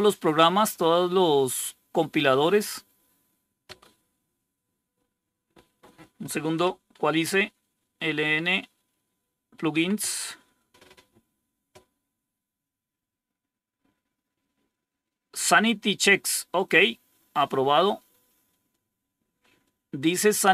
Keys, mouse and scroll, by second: 5.8 click, 6.7 Home, 9.6 End, 16.5-18.6 drag, 19.3 right click, 20.2 click.